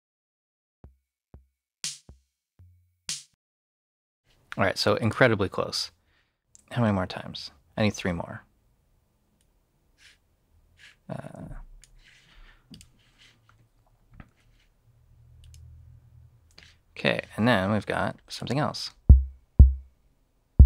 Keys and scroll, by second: 4.1 space, 14.2 3, 18.7 space.